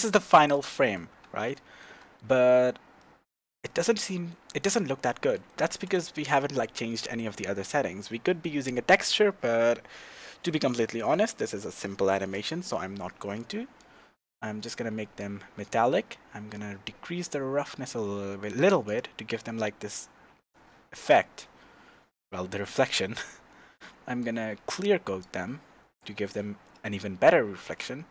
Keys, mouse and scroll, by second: 1.4-13.8 shift+middle drag, 2.2-3.0 scroll up 2, 13.8-28.1 drag.